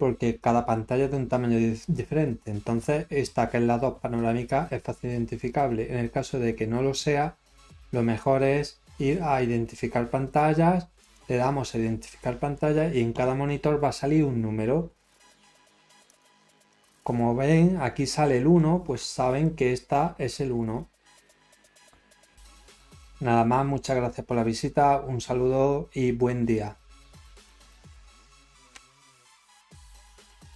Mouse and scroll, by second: 4.8 scroll up 1, 5.4 scroll up 1, 7.4-8.0 scroll up 3, 8.5 scroll up 1, 11.0 click, 16.1 click, 18.5 middle click, 19.0-19.3 scroll, 30.5 click.